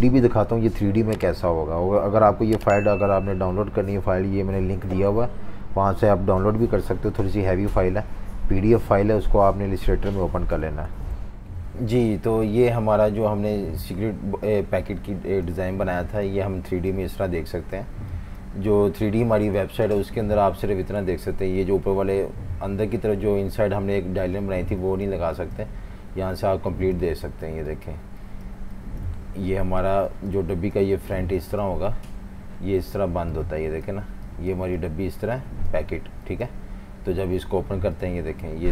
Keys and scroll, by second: 3.2 F18, 11.1 F19.